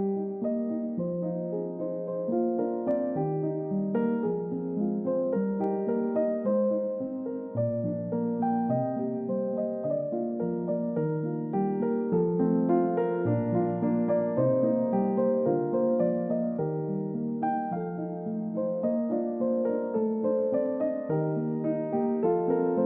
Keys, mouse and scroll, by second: 2.0-2.4 scroll down 1, 3.2-3.6 scroll up 1, 3.7 double click, 4.7-5.4 scroll down 1, 5.4 double click, 6.8 middle click, 7.2 scroll up 1, 8.7-9.2 scroll down 1, 12.8-13.6 scroll up 1, 19.5 space, 20.5 i.